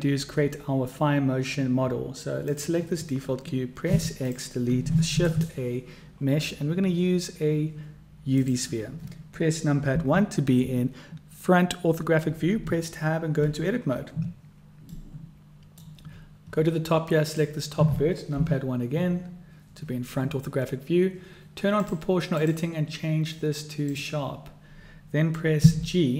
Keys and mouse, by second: 2.4 click, 3.9 x, 5.1 shift+a, 9.9 KP_1, 12.6 Tab, 14.9-15.9 middle drag, 17.3 click, 18.3 KP_1, 21.7 click, 22.4-24.3 drag, 25.6 g.